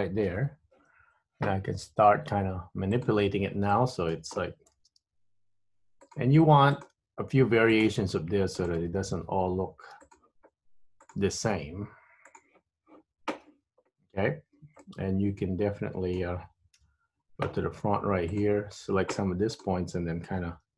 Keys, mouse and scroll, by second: 0.4 KP_3, 1.0-3.1 scroll up 3, 3.1 click, 3.8 shift+middle click, 4.9 g, 6.8 click, 7.0 g, 8.8 click, 8.9 g, 11.2 click, 11.4 g, 15.0 middle click, 16.9 KP_1, 18.5 click, 19.6 click.